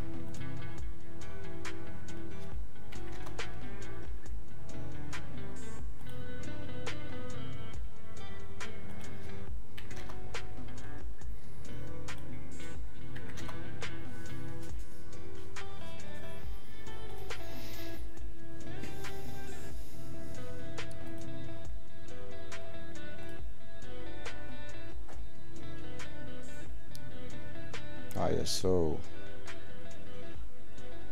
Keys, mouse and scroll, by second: 0.3 click, 2.9 click, 6.0 click, 12.0 click.